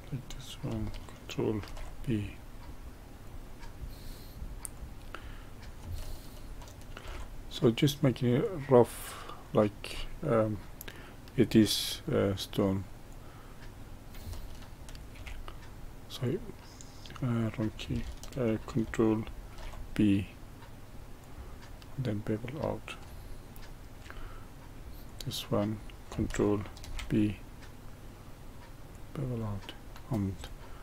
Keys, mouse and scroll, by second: 1.6 ctrl+b, 4.7 click, 7.0 ctrl+b, 9.9-13.0 middle drag, 13.0 click, 15.1 ctrl+v, 19.5 ctrl+b, 21.7-25.0 middle drag, 25.0 click, 26.8 ctrl+b, 29.4-30.4 middle drag, 30.4 click.